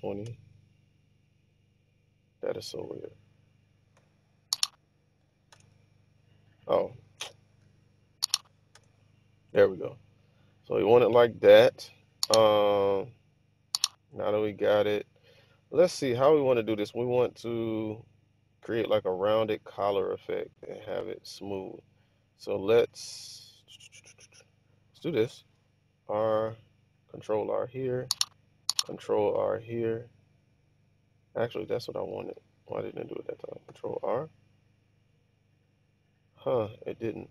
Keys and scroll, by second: 0.0-0.4 typing, 4.0 BackSpace, 5.3-6.1 typing, 5.5 Return, 7.3-9.3 typing, 10.5 typing, 21.4 Tab, 21.4 typing, 25.4 ctrl+r, 29.2 ctrl+r, 31.8 ↺, 32.4 super+z, 33.8 ctrl+r.